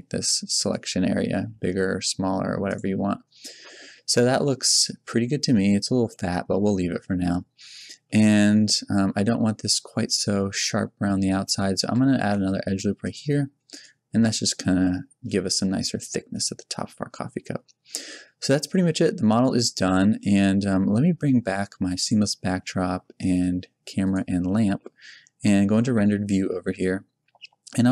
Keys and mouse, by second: 0.7-2.7 drag, 1.3 g, 2.9 Tab, 3.7 z, 7.5 Tab, 11.8 a, 12.2 ctrl+r, 14.1 Tab, 14.5 middle click, 14.9 middle click, 25.7 shift+z.